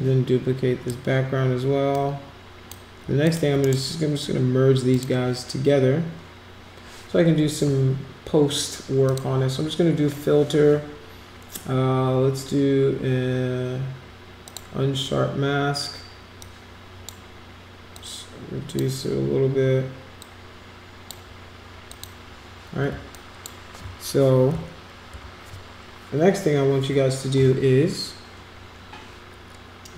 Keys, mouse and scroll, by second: 1.1 scroll down 2, 1.9 click, 3.2 shift+click, 3.6 right click, 4.9 click, 9.0 click, 14.4 click, 16.4 click, 17.9-18.7 drag, 20.2 click, 21.9 click, 22.9 space, 23.1 click, 25.1 ctrl+=.